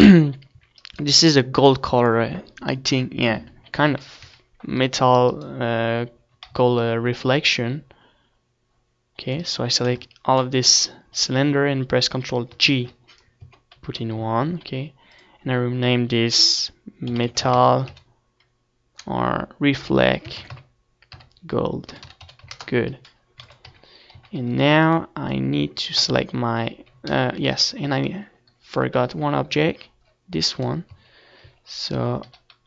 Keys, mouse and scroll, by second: 2.2-5.4 middle drag, 3.3 ctrl+s, 4.9 z, 5.4-7.7 right drag, 8.3 z, 8.6 z, 9.7-11.3 right drag, 10.9 c, 13.8 right click, 16.8 ctrl+j, 17.8 Tab, 18.2-27.0 middle drag, 18.6 Tab, 27.7 ctrl+s, 27.7-31.2 middle drag, 27.7 z.